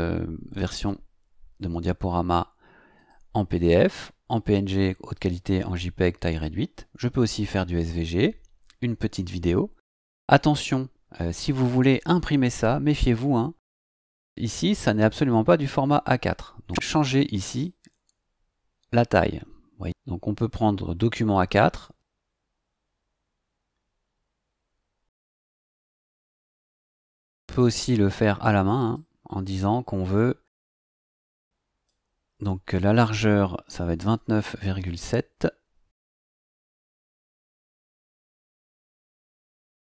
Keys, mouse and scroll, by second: 2.9 click, 7.9 scroll down 2, 11.2-11.6 scroll up 4, 14.3 click, 16.6 click, 17.5 click, 23.5 scroll down 1, 23.9-24.3 scroll up 1, 25.1 click, 27.3 click, 28.8 click, 31.8 click, 33.8 KP_1, 34.1 KP_9, 34.4 KP_Decimal, 34.7 KP_7, 36.2 BackSpace, 37.4 KP_2, 38.1 KP_Decimal, 38.4 KP_7, 39.6 click.